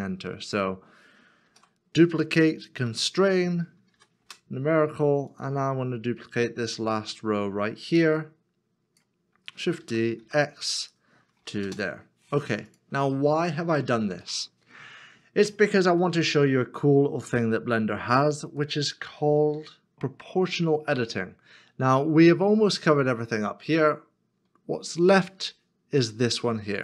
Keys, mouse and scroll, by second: 1.4 shift+d, 2.9 x, 3.9 4, 4.2 Return, 6.8 middle click, 9.8 shift+d, 10.2 x, 11.4 x, 11.6 Return, 13.2 middle click, 14.3 shift+middle click, 16.0 shift+middle click.